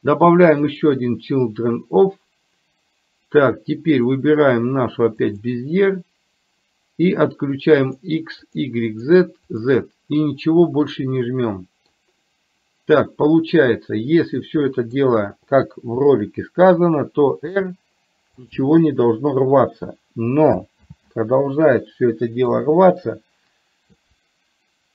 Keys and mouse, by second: 4.1-5.5 drag, 7.9 click, 8.5 click, 9.0 click, 9.5 click, 10.6-11.9 middle drag, 13.6-15.0 middle drag, 17.5 r, 20.9 ctrl+z.